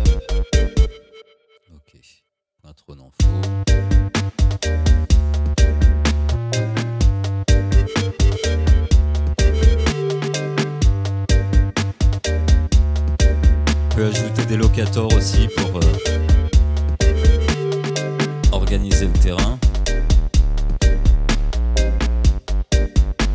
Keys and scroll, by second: 0.9 space, 3.2 space, 17.7 v, 19.9 space, 20.2 1, 20.8 Return.